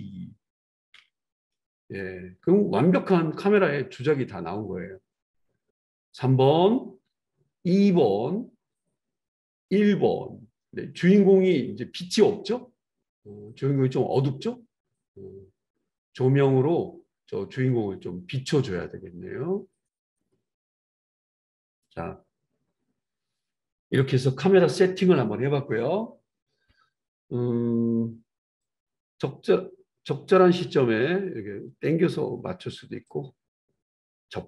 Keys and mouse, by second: 0.9 ctrl+b, 27.0 ctrl+s, 29.6-34.4 right drag.